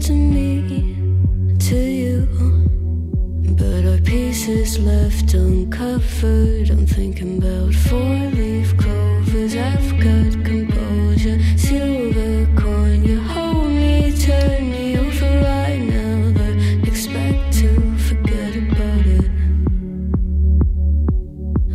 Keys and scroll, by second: 4.8 ctrl+z, 5.0 ctrl+z, 6.6 ctrl+z, 10.2 ctrl+z.